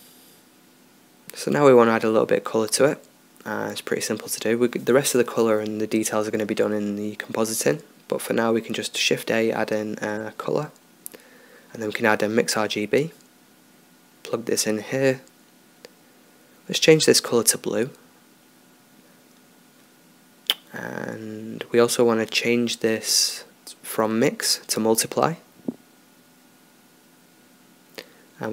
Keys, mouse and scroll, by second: 3.4 ctrl+s, 5.2-7.5 drag, 7.2 shift+a, 12.3 click, 14.5-16.4 drag, 16.6-18.7 drag, 23.2-24.1 middle drag, 25.7 click.